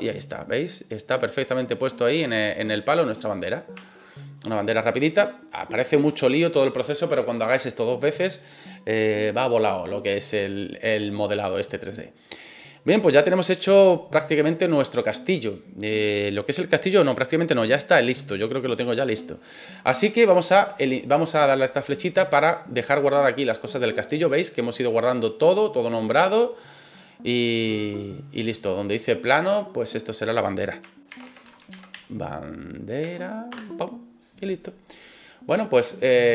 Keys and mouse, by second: 0.0 click, 0.4 right click, 0.8-2.5 middle drag, 3.3-3.7 middle drag, 3.9-4.3 shift+middle drag, 4.6-5.0 middle drag, 10.2-11.1 middle drag, 14.3-14.9 shift+middle drag, 24.1 click, 29.5 click, 29.6-34.4 drag.